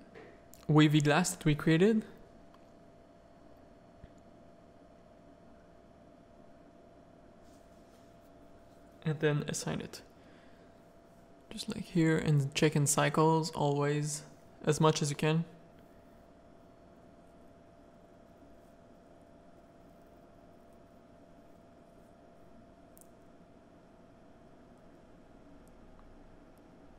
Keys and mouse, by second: 1.9 ctrl+KP_Add, 3.4 click, 4.5 middle click, 4.9 z, 4.9 middle click, 5.6 z, 6.3 middle click, 6.8 middle click, 7.6 click, 10.9 Tab, 10.9 middle click, 10.9 z, 12.1-14.3 middle drag, 16.3-19.8 middle drag, 20.2 z, 20.9 middle click, 21.3 z, 21.6 middle click, 22.5 click, 22.5 z, 23.0 z, 26.2 click.